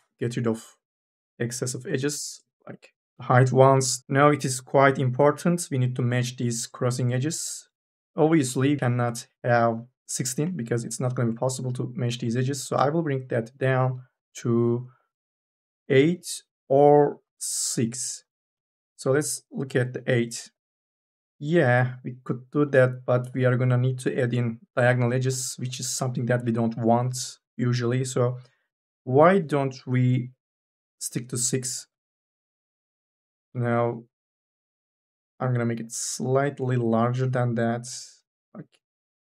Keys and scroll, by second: 2.0 KP_1, 2.2 Return, 36.8 ctrl+z.